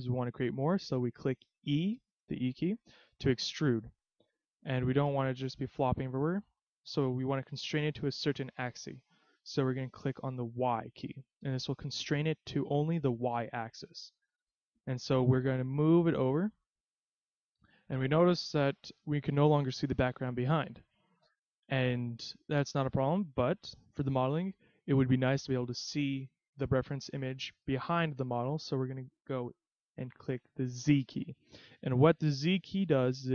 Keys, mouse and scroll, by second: 2.7 e, 16.2 click, 22.1 middle click, 24.1 KP_3, 28.4-28.9 scroll down 1, 31.0 z.